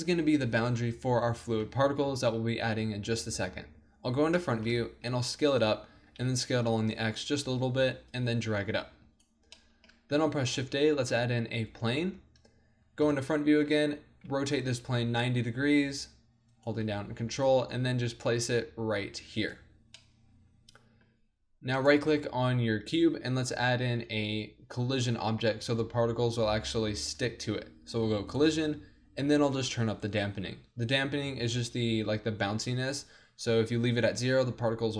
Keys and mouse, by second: 2.1 KP_1, 3.5 middle click, 4.4 click, 5.1 s, 5.4-7.5 drag, 6.0 s, 9.6 middle click, 9.9 middle click, 10.1 shift+a, 13.0 KP_1, 13.6 z, 14.3 r, 16.6-18.5 drag, 17.5 g, 19.5 click, 20.0 middle click, 21.8-25.8 drag.